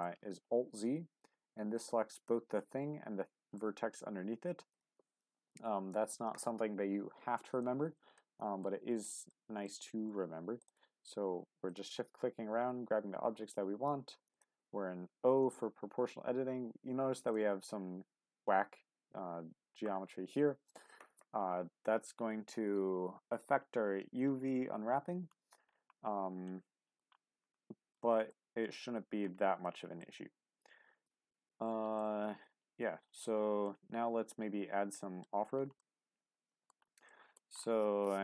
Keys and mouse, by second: 1.8 click, 2.6-3.6 middle drag, 4.7 click, 6.2 alt+z, 7.5 click, 8.2 middle click, 9.3 middle click, 12.6 g, 14.3 click, 25.2-26.4 middle drag, 26.5 shift+middle click, 27.9 shift+click, 28.1 shift+middle click, 29.6 shift+middle click, 31.3 Tab, 32.0-33.3 middle drag, 33.6-35.2 middle drag, 35.8-36.7 middle drag, 37.1 middle drag.